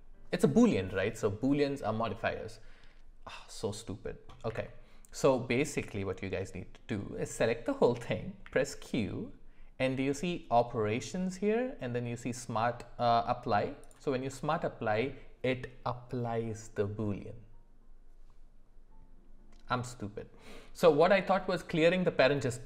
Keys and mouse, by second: 4.4 w, 8.4 q.